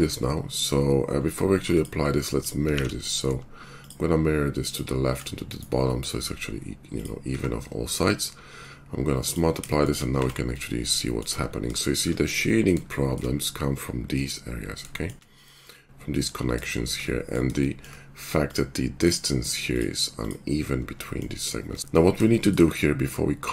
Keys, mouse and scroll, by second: 0.7 middle click, 2.7 alt+x, 3.8 shift+click, 4.8-9.6 shift+middle drag, 7.2 q, 9.6 shift+click, 10.0 middle click, 10.2 Tab, 10.9-14.9 shift+drag, 14.9-20.2 shift+middle drag, 20.2 click, 20.2-21.9 middle drag, 21.8 ctrl+z, 22.2-23.5 shift+middle drag.